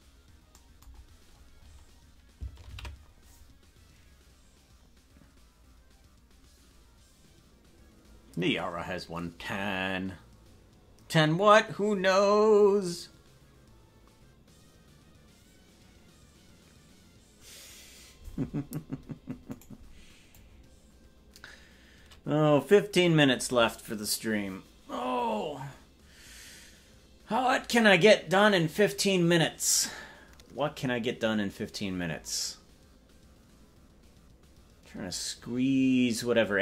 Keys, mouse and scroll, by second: 0.9-1.4 scroll down 1, 1.4 scroll up 1, 1.5 scroll down 2, 1.6-6.0 scroll down 3, 6.0 ctrl+s, 19.6 right click, 20.3-36.6 drag.